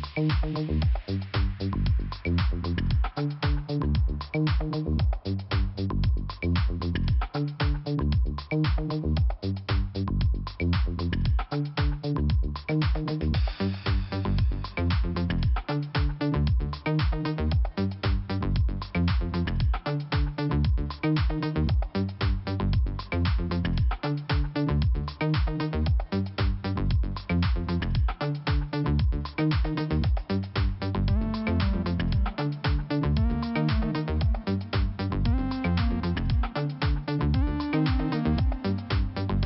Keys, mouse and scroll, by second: 2.0 click, 2.7 click, 6.3 click, 6.4 click, 8.0 click, 9.6 right click, 12.1 click, 13.5 click, 14.0 click, 15.7 click, 16.5 click, 18.0 scroll up 1, 19.3 click, 20.0 scroll down 1, 20.7-21.0 scroll up 1, 21.6 click, 22.8 click, 24.4 click, 28.2 scroll up 1, 28.7 click, 29.8 click, 31.4 click, 32.7 click, 33.3 click, 34.2 click, 34.9 click, 36.6 click, 38.3 click, 38.7 scroll down 3.